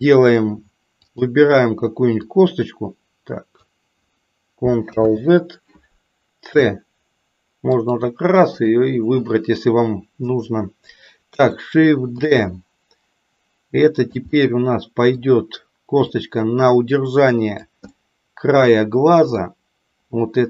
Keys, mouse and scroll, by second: 1.0 click, 2.3-3.5 drag, 4.9 ctrl+z, 6.4 c, 12.2 shift+d, 14.4 middle click, 16.0-17.6 drag, 17.9-19.5 middle drag.